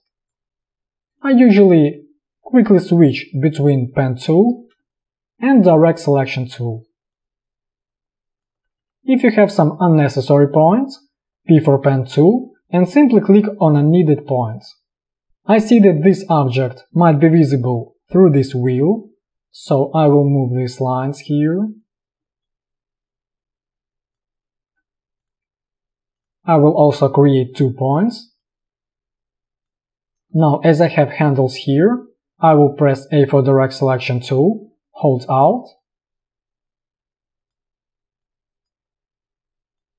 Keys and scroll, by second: 1.2 space, 2.6 p, 4.9 space, 11.3 p, 15.2 space, 22.1 p, 32.4 a.